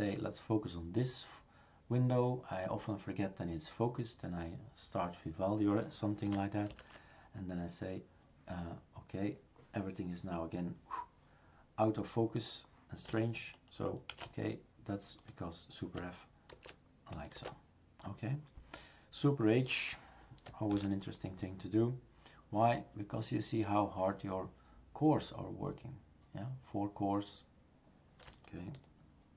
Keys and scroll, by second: 6.7 ctrl+alt+v, 14.1 shift+super+q, 16.5 super+f, 20.7 super+h.